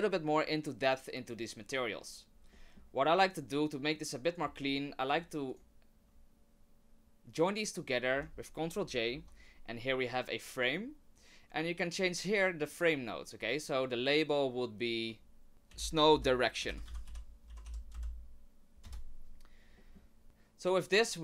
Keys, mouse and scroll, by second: 2.5 middle click, 4.3 click, 4.7 shift+click, 5.5 click, 8.9 ctrl+j, 13.8 click, 19.8 middle click, 20.2 click.